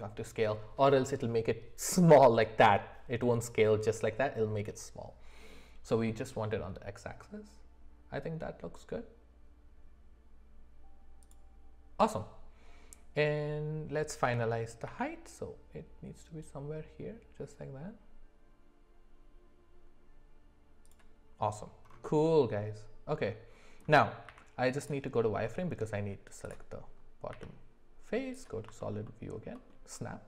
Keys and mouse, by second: 14.2 g, 22.2-23.8 middle drag, 24.3 z, 25.2 middle click, 29.0 alt+middle click.